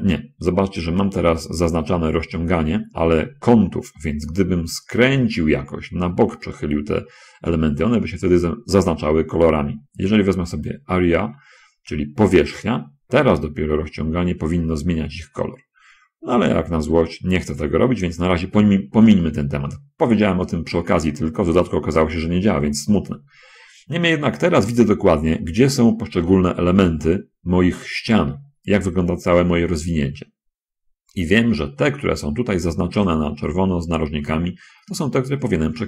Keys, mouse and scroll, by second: 11.0 click, 13.6 s, 17.6 Escape, 19.2-20.6 shift+drag, 26.5 scroll up 2, 29.5 scroll down 2, 35.4 scroll down 2.